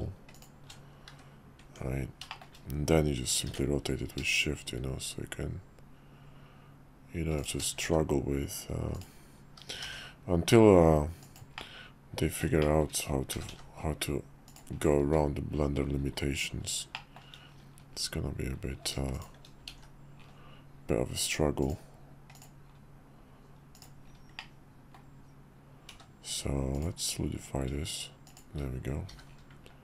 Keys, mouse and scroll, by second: 1.6 Tab, 2.3 shift+middle click, 3.4 r, 7.7 s, 9.9 g, 11.6-12.4 middle drag, 12.6 shift+middle drag, 13.4 g, 15.0 `, 17.0 shift+middle click, 19.7 alt+x, 21.6 click, 22.3 click, 23.7 click, 24.4-25.0 drag, 25.9 q, 29.1 h.